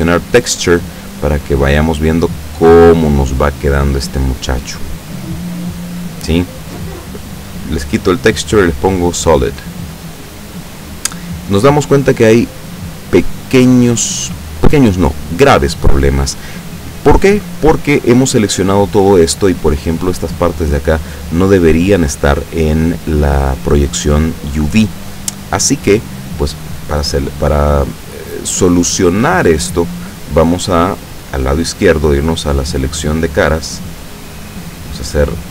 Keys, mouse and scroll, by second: 0.0 click, 7.8 click, 8.9 click, 14.0-14.4 scroll up 1, 14.8-15.6 scroll down 1, 17.6 scroll up 1, 24.9-27.5 middle drag, 32.5 click.